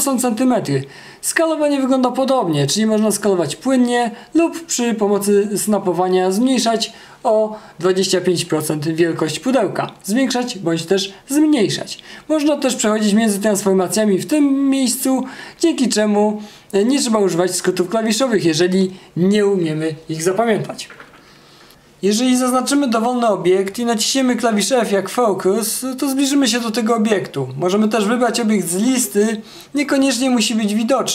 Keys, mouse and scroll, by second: 2.4 r, 21.1 alt+f, 24.5 f.